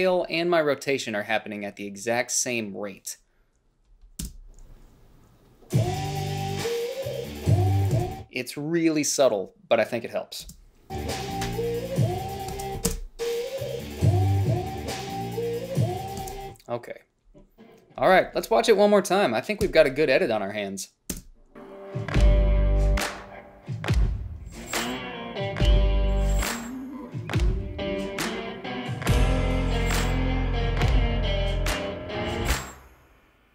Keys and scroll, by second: 4.5 space, 8.2 space, 10.7 space, 12.8 space, 16.5 space, 19.9 Home, 21.4 space.